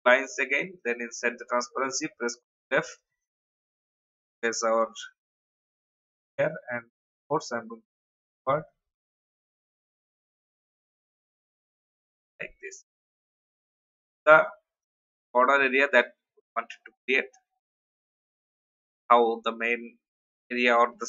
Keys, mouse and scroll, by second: 1.5 ctrl+f, 3.0 click, 3.8 alt+scroll up 1, 4.9-5.6 scroll up 1, 5.6-6.3 scroll up 1, 6.3 click, 8.3 alt+scroll down 1, 9.2 alt+scroll up 1, 10.3 click, 12.0 alt+scroll down 1, 12.6-13.2 alt+scroll down 2, 13.6 click, 14.0-14.8 alt+scroll up 1, 14.8 click, 20.3 alt+scroll down 1.